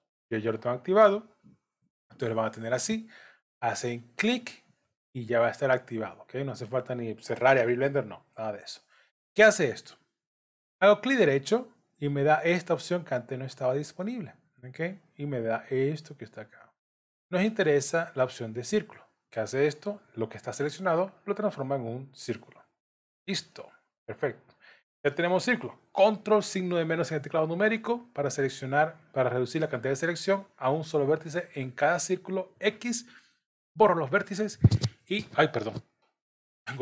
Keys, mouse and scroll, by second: 11.3 right click, 23.5 middle click, 26.7 ctrl+KP_Subtract.